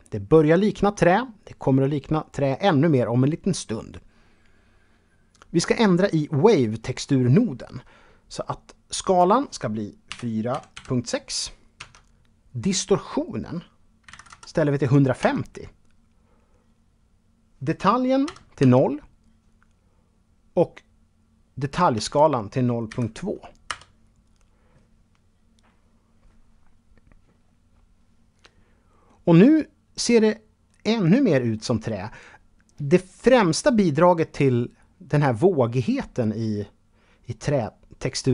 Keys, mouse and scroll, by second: 8.2 click, 9.3 KP_4, 9.7 KP_Decimal, 9.9 KP_6, 11.0 Tab, 13.2 KP_1, 14.4 Tab, 17.4 KP_0, 17.8 Tab, 21.1 KP_0, 22.1 KP_2, 22.8 Return, 28.2 middle click.